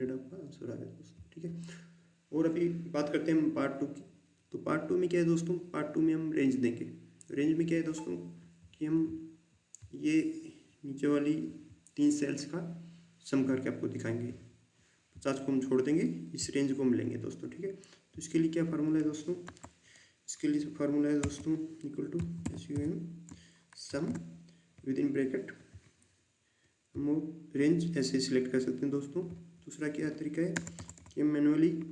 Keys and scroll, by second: 19.4 Delete, 21.2-22.7 typing, 23.9 typing, 30.5 BackSpace, 30.7 BackSpace.